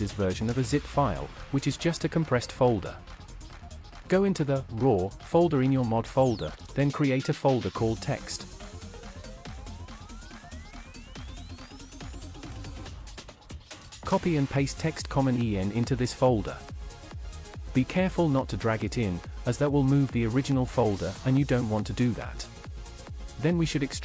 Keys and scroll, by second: 0.0 ctrl+c, 10.6-12.0 typing, 15.4 ctrl+v.